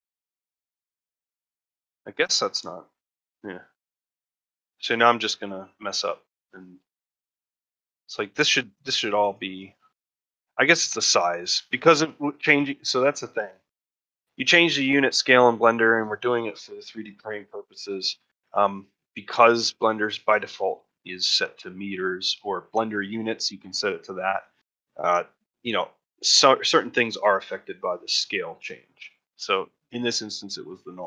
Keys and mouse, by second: 0.1 shift+middle click, 0.5 middle click, 1.1 middle click, 1.7 shift+middle click, 2.9-16.8 drag, 16.8 middle click, 17.2 shift+middle click, 17.5 middle click, 18.1 ctrl+middle click, 18.4 shift+middle click, 18.8 middle click, 19.4 shift+middle click, 19.9 middle click, 20.5 ctrl+middle click, 20.8 shift+middle click, 21.5 middle click, 22.0 ctrl+middle click, 29.2 middle click, 30.1 middle click.